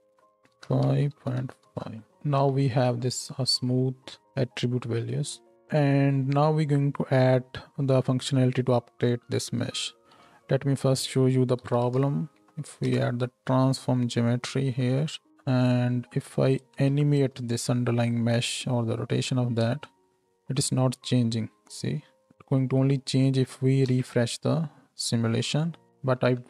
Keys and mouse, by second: 2.1 shift+middle click, 2.1 shift+space, 2.4 shift+Left, 5.5 space, 9.9 shift+a, 14.6 click, 16.9 shift+Left, 19.6 space, 23.8 shift+Left, 26.1 shift+Right, 26.3 shift+Left.